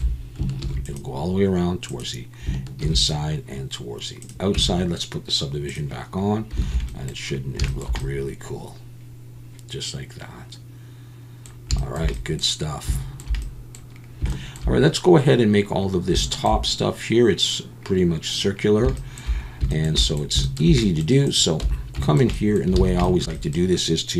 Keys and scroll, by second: 0.6 ctrl+r, 2.8 ctrl+r, 4.5 Tab, 6.6 alt+a, 21.6 Tab, 22.8 alt+a.